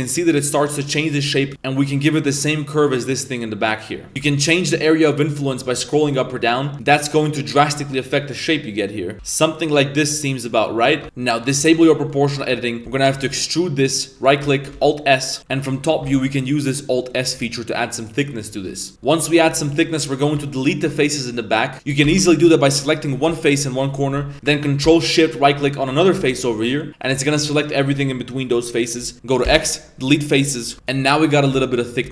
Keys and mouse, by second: 4.1 g, 9.1 a, 9.1 g, 11.0 Tab, 11.4 click, 11.9 middle click, 12.4 middle click, 12.7 middle click, 13.1 e, 14.8 alt+s, 15.4 KP_7, 16.0 alt+s, 18.9 Tab, 18.9 middle click, 18.9 z, 19.3 middle click, 19.5 3, 19.9-20.2 middle drag, 20.6 ctrl+shift+right click, 22.0 a, 22.7 right click, 22.7 a, 23.3 z, 25.4 right click, 26.6 middle click, 28.8 middle click, 29.4 x, 30.4 middle click, 30.7 Tab, 30.9 Tab, 31.5 1, 32.0 z.